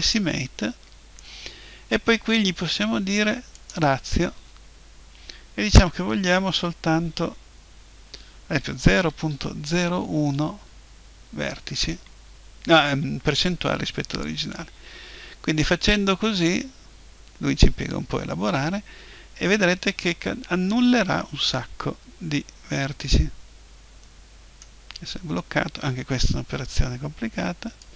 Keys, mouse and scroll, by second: 3.6-5.6 drag.